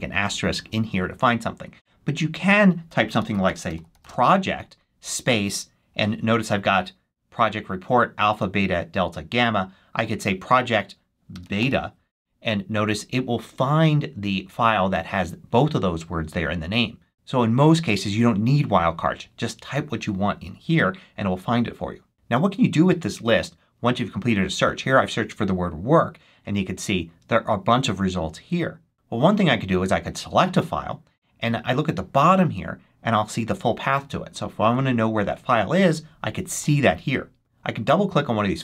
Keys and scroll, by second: 2.8-4.4 typing, 11.0-12.1 typing.